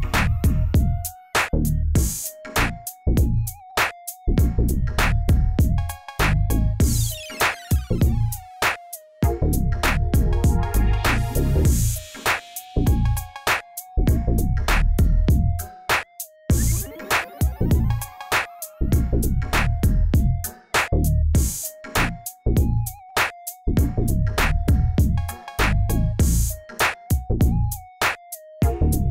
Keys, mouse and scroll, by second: 0.0 scroll down 1, 0.2 middle click, 0.9 click, 1.2 scroll down 3, 1.4-3.2 middle drag, 3.2-3.8 scroll up 1, 3.8 KP_1, 4.3 shift+a, 5.6 s, 6.6 g, 8.0 scroll up 2, 8.3-9.8 shift+middle drag, 9.8 click, 10.0 scroll up 1, 10.4 Tab, 10.7 click, 11.6 click, 12.1 g, 13.7 a, 14.4 g, 17.4 ctrl+r, 19.1 click, 20.4 s, 21.9 ctrl+r, 23.3-24.7 drag, 25.0 click, 26.1 ctrl+r, 27.8 ctrl+z, 27.8-29.1 middle drag.